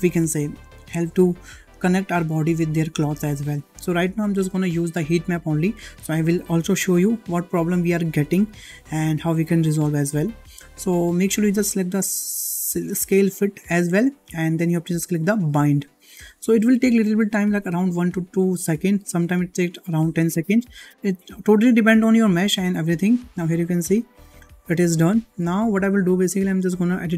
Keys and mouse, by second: 12.5 click, 15.4-22.2 drag, 24.9-25.2 shift+middle drag.